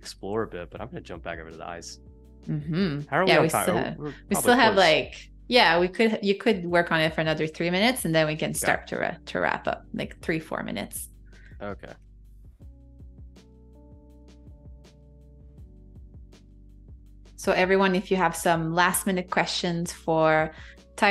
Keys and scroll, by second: 0.0 space, 1.0 z, 1.6 space, 3.4 v, 12.6 super+y, 14.3 super+y, 15.3 super+c, 16.9 Escape, 18.9 super+f, 20.5 super+[.